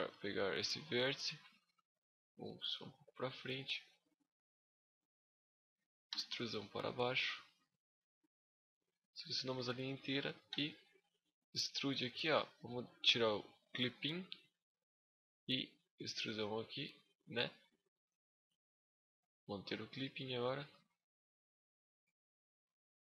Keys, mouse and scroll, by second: 1.0 shift+d, 1.4 right click, 2.5 click, 6.1 right click, 6.4 click, 9.2 alt+right click, 10.3 e, 10.5 right click, 11.0 click, 13.5 click, 18.9 click, 19.3 scroll down 2, 19.5 middle click, 21.0 z, 21.3 middle click, 22.3 scroll up 1, 22.3 right click.